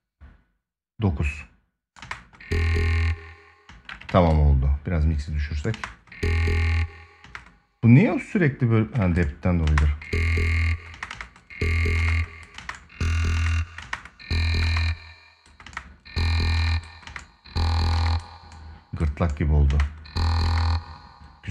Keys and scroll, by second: 1.7 space, 3.4 space, 3.8 ctrl+s, 5.5 space, 6.9 space, 9.4 space, 10.7 space, 19.4 space.